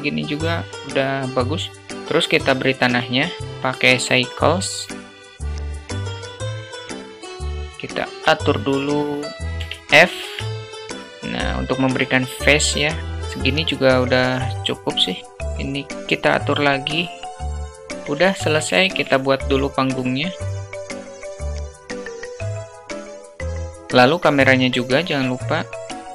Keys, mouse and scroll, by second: 3.1 shift+a, 5.3 click, 5.8 alt+middle click, 6.1 Tab, 6.3 Tab, 6.6 1, 6.9 s, 9.8 f, 10.5 Tab, 11.3-11.9 alt+middle drag, 13.2-15.3 alt+middle drag, 15.7-17.4 drag, 17.4-18.4 alt+middle drag, 17.4 s, 19.0 shift+a, 20.5 s, 21.1 s, 21.3 alt+middle click, 21.4 Tab, 21.6 2, 21.7 click, 21.8 alt+middle click, 21.9 e, 22.4 ctrl+b, 23.0 ctrl+b, 23.3 Tab, 23.4 `, 23.7 alt+middle click, 23.9 shift+a.